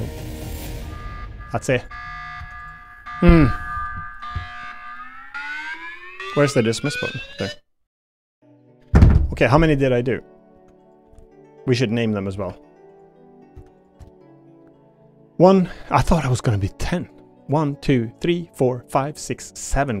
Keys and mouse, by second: 0.6 y, 2.4 Tab, 2.6 click, 9.8 click, 10.5 Tab, 10.8 click, 11.0 l, 12.4 Delete, 13.5 Tab, 14.0 shift+middle click, 15.6 click, 17.0 click, 17.7 click, 18.1 click, 18.5 click, 18.8 click, 19.4 click.